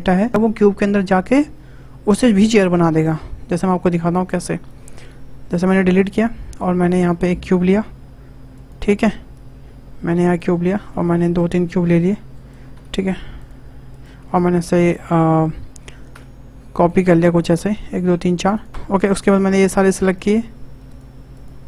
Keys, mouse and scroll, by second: 4.1-5.2 drag, 5.2 Delete, 6.4-6.8 middle drag, 6.8 click, 7.3 shift+a, 9.3 click, 10.8 shift+d, 12.7 x, 13.9 click, 14.5 shift+d, 17.4 shift+r, 17.6 shift+r, 17.8 shift+r, 18.5 click, 19.2 shift+click, 19.6 shift+click, 20.0 shift+click, 20.9 shift+click, 21.3 shift+click.